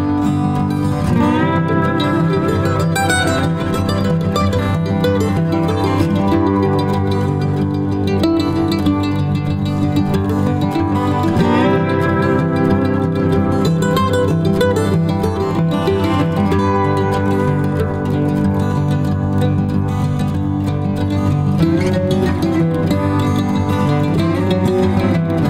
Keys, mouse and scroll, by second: 2.7 alt+click, 3.1 alt+click, 6.5 space, 7.0 ctrl+alt+click, 11.7 shift+click, 13.2 ctrl+alt+click, 14.0 shift+click, 15.0 y, 16.9 alt+click, 18.4 alt+click, 23.4 alt+click.